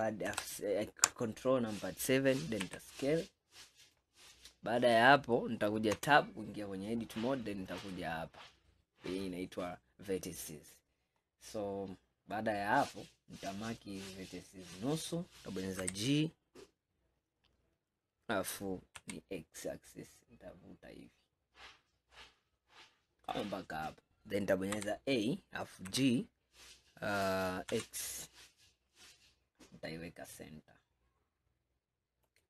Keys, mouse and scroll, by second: 0.4 ctrl+KP_7, 1.5-2.8 scroll up 2, 2.8 s, 6.0 Tab, 7.9 click, 10.8-11.2 scroll up 1, 11.2-11.8 scroll down 7, 12.2 scroll up 2, 13.8 click, 15.9 g, 24.8 a, 25.9 g.